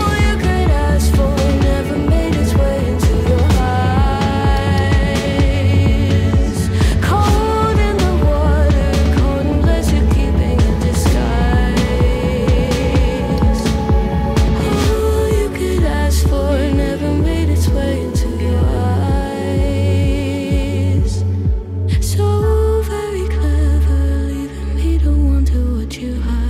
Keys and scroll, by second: 13.7 ctrl+z, 16.1 ctrl+z, 17.3 ctrl+z, 18.1 ctrl+z, 18.5 ctrl+z, 22.3 ctrl+z, 22.8 ctrl+z, 25.1 ctrl+z.